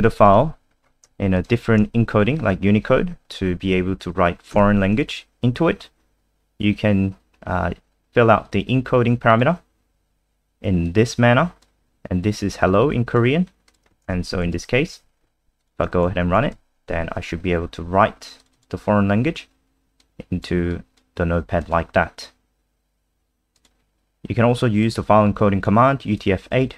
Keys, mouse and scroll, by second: 0.2 click, 0.7-1.3 scroll up 2, 1.3 shift+click, 4.5 ctrl+v, 7.4-8.0 scroll up 1, 8.4 click, 14.3 End, 14.5 Home, 14.9 Delete, 15.6 click, 16.1 ctrl+s, 16.5 F5, 18.4 click, 18.5 click, 20.0 click.